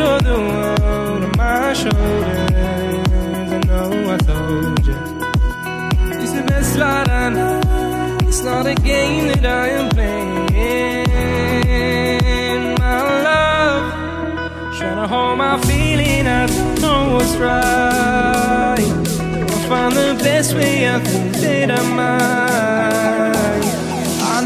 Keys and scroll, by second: 2.9 ctrl+t.